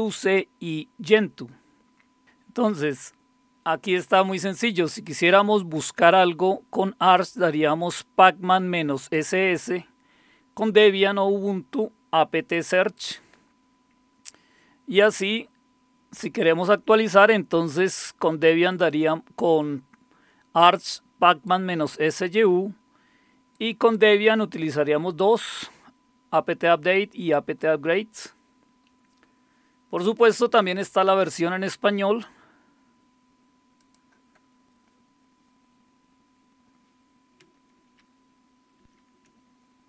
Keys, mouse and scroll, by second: 1.9-2.2 scroll down 2, 2.2-4.2 scroll up 2, 4.2-5.0 scroll down 2, 5.0-6.7 scroll up 1, 6.7-9.5 drag, 10.6-12.6 drag, 13.0 click, 13.5 click, 13.5-16.1 scroll down 4, 18.7-21.6 drag, 23.5 click, 28.1-28.9 scroll down 2, 28.9-29.4 scroll up 3, 30.7 click, 33.8 click, 37.9 ctrl++, 38.8 ctrl++.